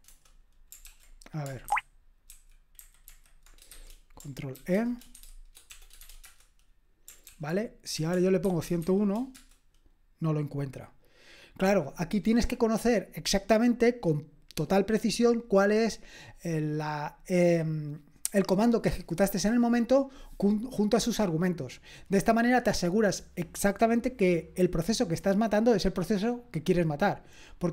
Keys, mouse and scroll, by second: 0.0-0.7 typing, 0.1 Return, 0.8 ctrl+p, 1.7 alt+b, 2.3 alt+v, 4.6-7.8 typing, 8.8 ctrl+e.